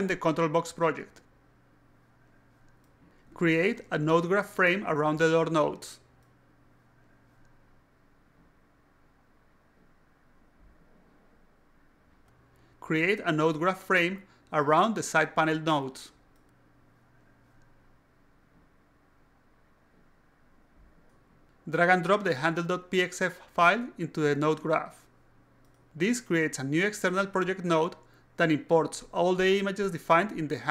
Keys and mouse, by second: 1.0 click, 2.2 click, 3.4 alt+click, 4.1-4.5 alt+drag, 4.9 right click, 5.0-5.8 typing, 5.8 click, 6.2 click, 7.0 click, 7.9 click, 9.0 right click, 9.2 click, 9.4-10.2 typing, 10.3 click, 11.1 click, 11.5 click, 12.0 click, 12.3 alt+click, 13.0 right click, 13.2-14.0 typing, 13.9 click, 14.0 click, 14.4 click, 15.1 click, 15.9 click, 16.7 right click, 16.9-18.4 typing, 17.3 click, 18.3 click, 18.8 click, 19.5 click, 19.9 click, 20.2 alt+click, 20.3-21.0 alt+drag, 24.2 click, 25.3 click, 27.4-28.6 drag, 29.7 click.